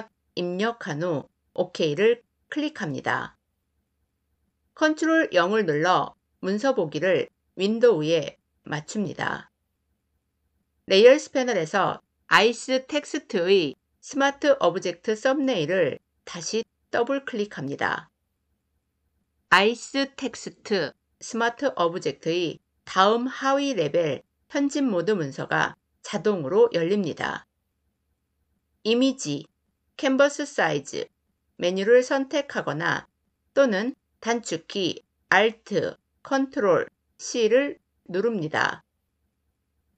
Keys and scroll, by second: 4.6 ctrl+0, 29.4 ctrl+alt+c.